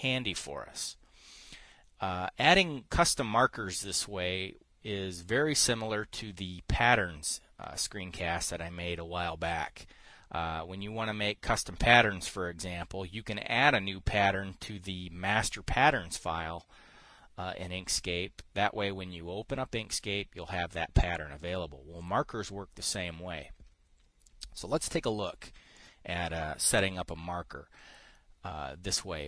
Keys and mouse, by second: 26.3 click.